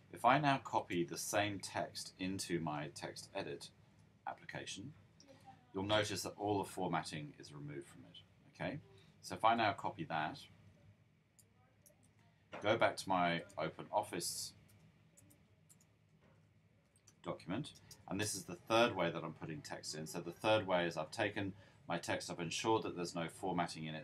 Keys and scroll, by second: 4.2 super+v, 11.8 super+c, 15.9-17.7 typing, 20.2-20.7 typing.